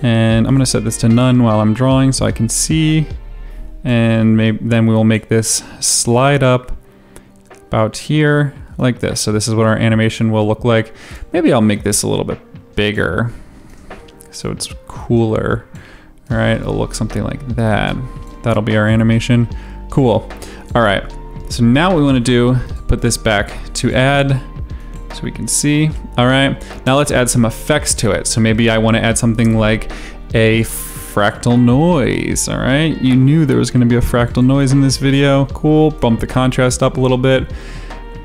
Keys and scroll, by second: 4.1 v, 30.5-32.2 typing.